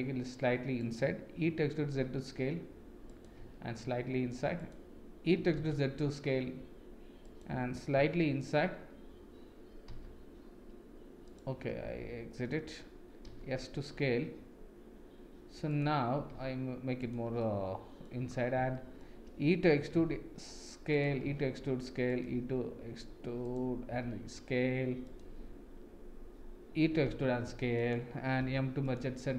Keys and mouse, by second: 1.4 e, 3.4 s, 5.4 e, 8.0 e, 11.8 ctrl+z, 13.3 s, 17.4-18.0 middle drag, 18.7 shift+middle click, 19.8 e, 21.1 e, 22.2 e, 23.9 s, 26.9 e, 28.4 m.